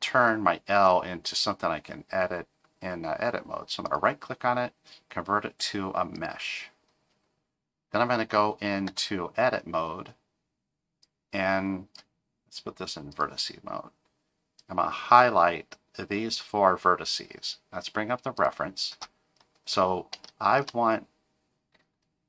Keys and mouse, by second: 3.8-6.2 right drag, 8.9 Tab, 11.1 click, 13.1 click, 14.7 click, 18.4 click, 20.3 shift+middle click.